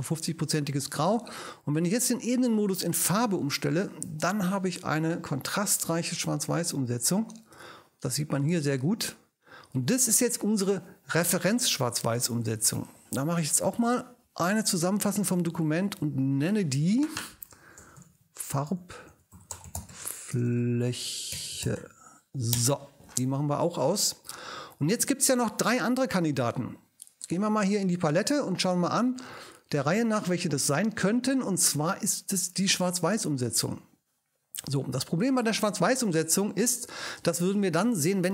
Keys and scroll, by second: 14.5 alt+shift+super+e, 15.5 ctrl+alt+shift+super+e, 15.9 ctrl+alt+shift+super+i, 17.5-22.3 typing, 22.5 Return.